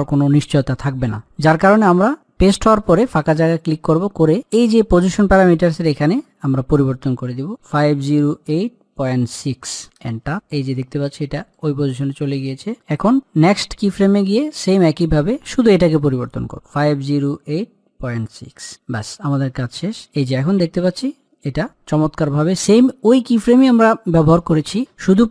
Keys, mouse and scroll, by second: 0.2-2.4 middle drag, 2.8 click, 5.8 click, 11.3-13.4 middle drag, 13.4 click, 19.9 click, 20.0-25.3 drag.